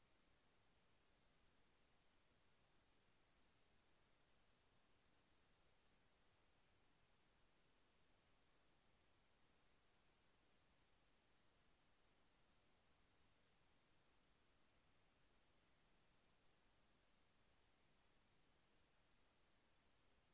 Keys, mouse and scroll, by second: 3.6-5.8 drag, 6.6-8.4 drag, 9.0-10.0 drag, 11.6 click, 15.0 click, 17.1 click, 19.8 click.